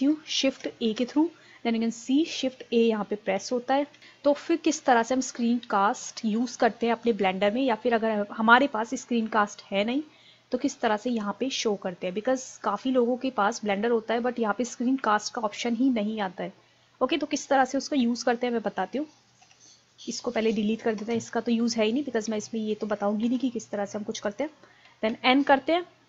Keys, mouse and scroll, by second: 0.9 shift+a, 4.0 n, 5.0-7.1 middle drag, 10.9-11.8 drag, 12.8 click.